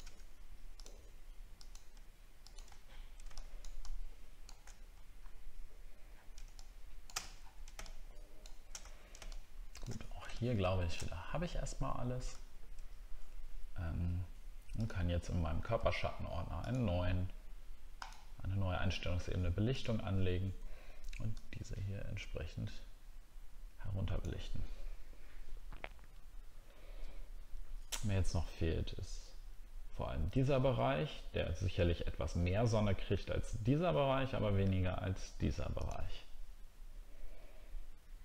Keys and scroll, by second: 2.8 alt+scroll down 1, 5.2 alt+scroll up 1, 6.1 alt+scroll down 1, 7.4 alt+scroll down 1, 8.9 alt+scroll down 3, 12.4 alt+scroll down 1.